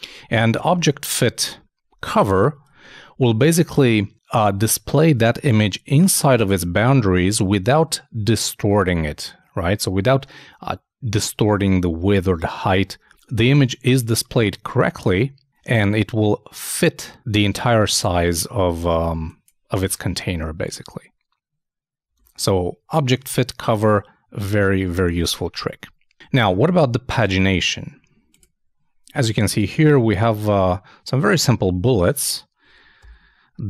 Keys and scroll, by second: 0.7 super+Tab, 2.7 super+Tab, 22.1 super+Tab, 26.8 super+Tab, 33.0 super+..